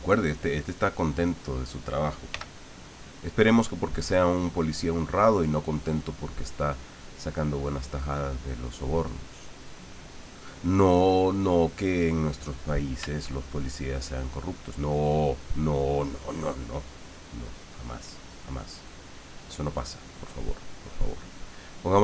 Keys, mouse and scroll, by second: 0.7 click, 2.3 f, 3.5 click, 7.6-9.0 drag, 9.9 click, 10.3 click, 10.7-12.2 drag, 15.1 middle click, 16.3-19.5 middle drag.